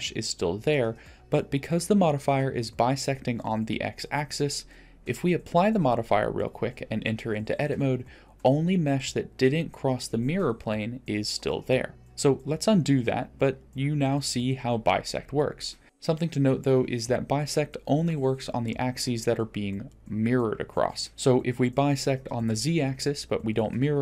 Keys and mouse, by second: 0.6 Tab, 2.0 middle click, 3.3 Tab, 4.7 shift+middle drag, 6.6-7.3 drag, 8.0 Tab, 8.8-9.8 middle drag, 11.3 middle click, 12.9 ctrl+z, 12.9 Tab, 12.9-13.9 middle drag, 17.0 click, 17.9 click, 19.5 g.